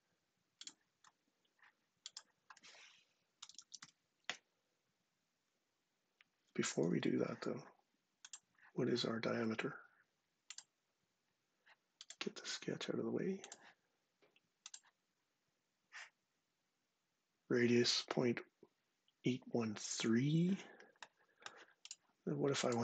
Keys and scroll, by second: 2.9-4.0 typing, 6.3 ↻.